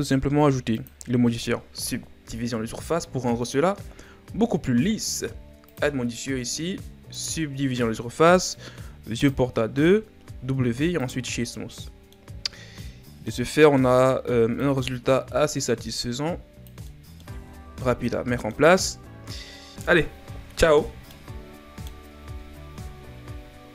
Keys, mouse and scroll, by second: 0.7 click, 7.3-8.7 drag, 9.2-10.4 drag, 10.4 w, 11.5-12.3 middle drag, 12.3-12.8 scroll up 3, 12.8-13.5 middle drag, 13.5 Tab, 14.5-16.9 drag, 16.9 middle click, 17.3 Tab, 17.6 scroll down 1, 17.8-19.7 middle drag, 21.1-23.7 middle drag.